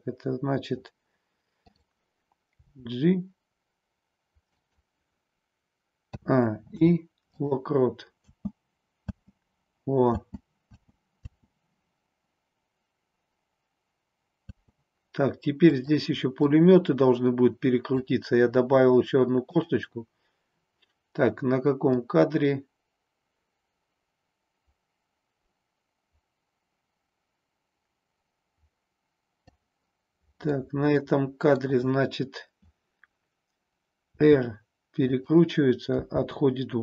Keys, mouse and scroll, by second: 2.5 g, 4.6 click, 6.1 a, 6.6 i, 8.2-11.2 typing, 14.6 space, 15.7 click, 16.5-18.1 drag, 19.5 click, 22.0-29.6 drag, 30.5-31.7 middle drag, 34.1 r, 35.1 click, 36.0 g.